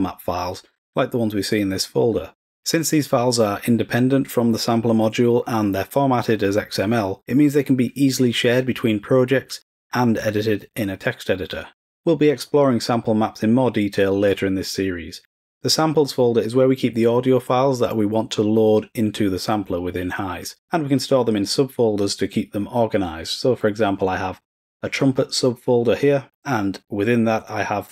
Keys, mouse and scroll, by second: 15.5 click, 25.3 click, 25.6 click.